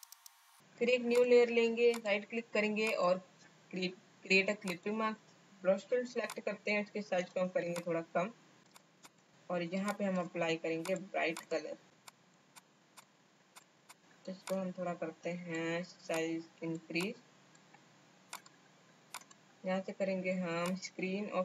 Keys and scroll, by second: 9.0 space.